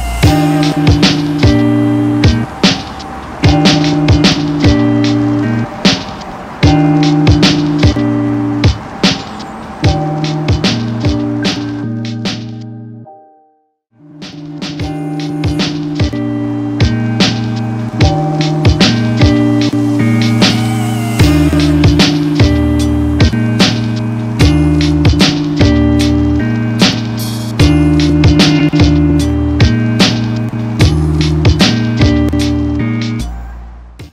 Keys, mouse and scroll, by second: 8.4-13.9 drag.